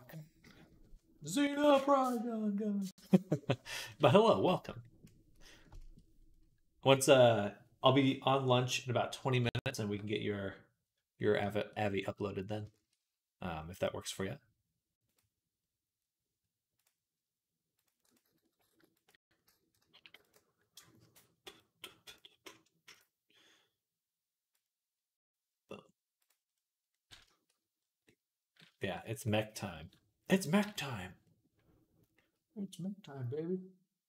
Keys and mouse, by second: 13.4-27.4 middle drag, 27.4 click, 27.6-28.9 middle drag, 29.1 middle click, 29.6-34.0 drag, 30.5 ctrl+s.